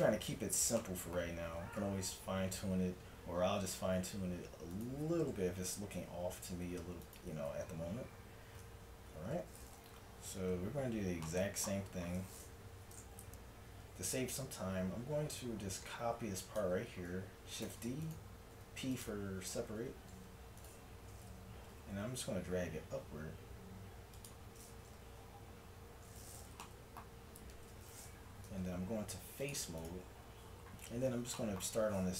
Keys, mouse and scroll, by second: 1.6 Tab, 2.7 middle click, 3.7 s, 5.4 KP_1, 6.0 s, 9.1 Tab, 12.8 Tab, 13.1 z, 13.6 a, 17.7 shift+d, 18.5 p, 19.8 Tab, 21.7 g, 25.0 z, 25.4 click, 25.8 Tab, 28.5 ctrl+Tab.